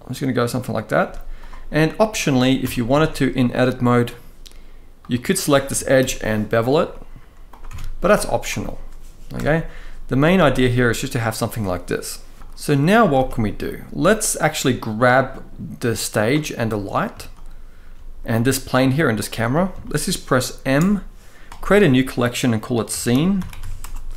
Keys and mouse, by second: 0.7 z, 1.5-1.8 middle drag, 2.3 Tab, 2.6 shift+middle click, 3.7 click, 5.7 ctrl+b, 7.1 click, 7.3 Tab, 7.8 right click, 9.0 KP_0, 9.9 z, 12.7 ctrl+s, 12.8 ctrl+s, 13.2-14.0 middle drag, 14.7-15.9 drag, 16.2-16.5 middle drag, 17.5-17.8 shift+middle drag, 18.0-18.3 middle drag, 19.5 shift+middle drag, 20.4 m.